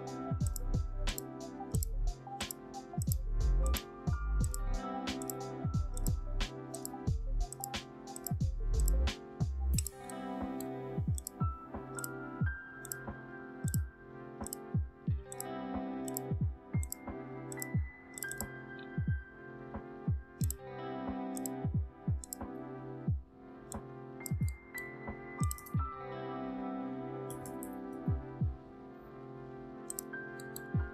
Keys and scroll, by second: 25.5 ctrl+a, 27.2-27.5 typing, 27.8 Return.